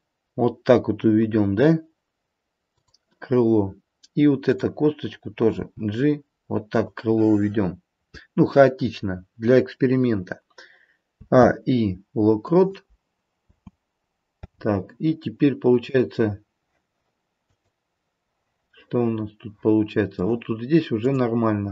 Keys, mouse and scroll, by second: 4.4 click, 5.5 g, 11.1 a, 11.3 i, 13.4 space, 14.3 space, 16.0 click, 17.5 click, 18.7 middle click, 20.1 middle click, 21.1 click.